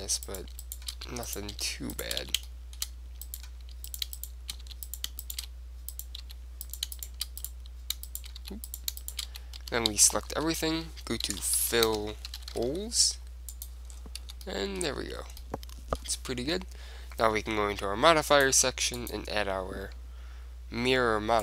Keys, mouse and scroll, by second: 1.1 f, 1.5-10.8 right drag, 2.4 f, 2.6-4.3 drag, 4.8 f, 5.5 shift+f, 6.4 f, 8.5-10.6 typing, 11.8 l, 14.1-17.3 middle drag, 14.4 Tab, 18.4-20.8 drag.